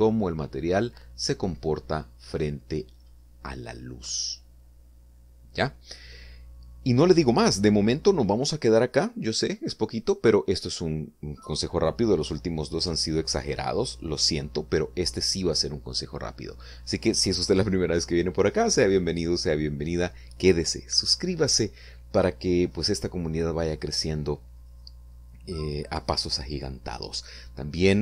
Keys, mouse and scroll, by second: 10.4 click, 11.1 click.